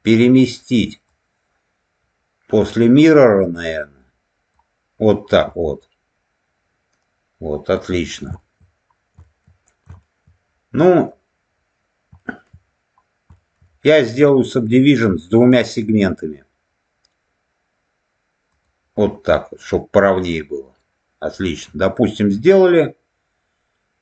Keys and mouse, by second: 1.0-4.5 drag, 5.4-8.0 middle drag, 8.3 shift+middle click, 9.2 shift+middle click, 9.9 shift+middle click, 12.1 shift+middle click, 13.3 shift+middle click, 18.5 click, 19.7-21.5 middle drag.